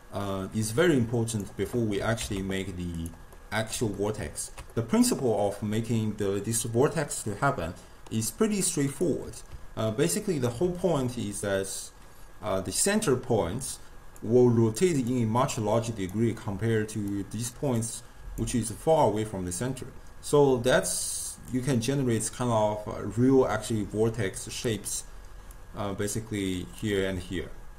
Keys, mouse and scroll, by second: 0.7 click, 2.0 g, 3.4-7.8 middle drag, 9.0 click, 10.0-12.6 ctrl+middle drag, 12.6-14.1 typing, 14.2 click, 15.2-15.5 d, 15.5 click, 16.2-17.1 d, 17.2 click, 17.6 d, 17.8-18.5 drag, 18.5-19.0 d, 20.7-21.5 d, 21.6-24.7 drag, 24.7-25.6 d, 25.6-26.9 drag, 26.9-27.7 d.